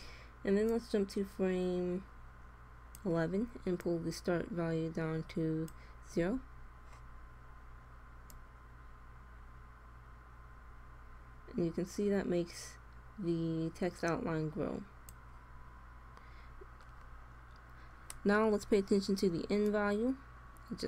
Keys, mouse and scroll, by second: 0.6-2.4 drag, 3.6-5.5 drag, 6.0 i, 8.3-10.1 drag, 19.5-20.8 drag.